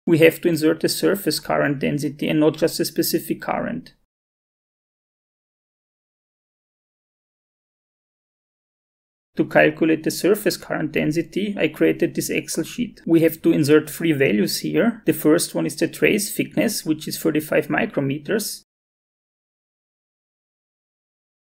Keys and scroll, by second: 14.9-16.1 typing, 18.7 BackSpace, 20.0-21.1 typing.